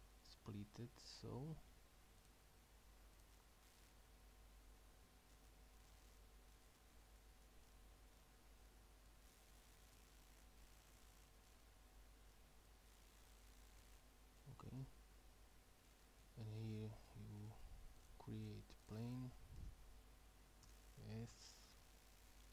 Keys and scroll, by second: 20.7 s.